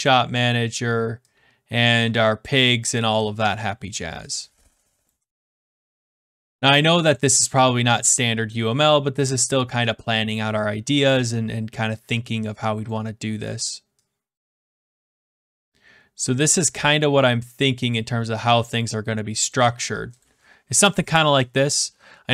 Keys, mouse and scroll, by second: 0.0 click, 2.9 click, 5.0 click, 5.6 click, 7.1 click, 9.1 click, 9.8 middle click, 10.3 middle click, 11.1 click, 12.8 click, 14.8 click, 15.6 click, 17.4 click, 19.4 click, 20.2 click.